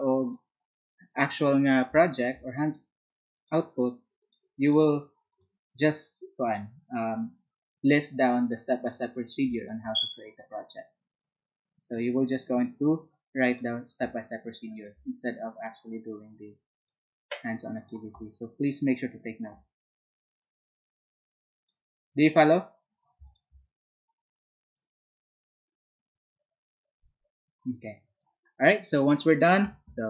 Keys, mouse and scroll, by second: 4.2 alt+click.